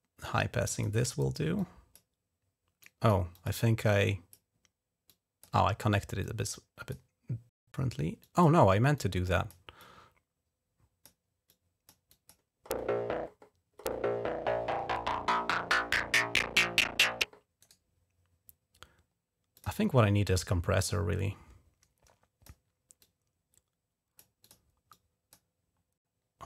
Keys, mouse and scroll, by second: 1.4 click, 2.7 click, 3.2 click, 3.4 click, 4.9 click, 6.1 click, 6.8 scroll up 1, 8.0 click, 8.3 scroll up 1, 8.8 click, 9.3 scroll up 1, 9.6-10.9 drag, 11.3 click, 11.9 click, 17.5 right click, 19.4 click, 20.2-22.3 drag, 22.3 right click, 22.9-24.1 drag, 24.3 click, 24.8 click.